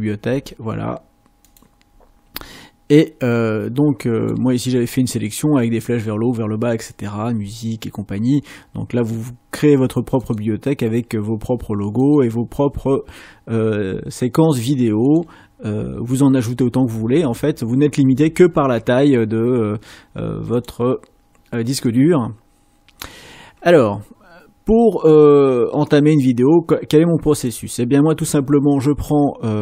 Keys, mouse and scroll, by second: 10.1 click, 12.0 click, 20.5 click, 21.8 click, 25.9 click.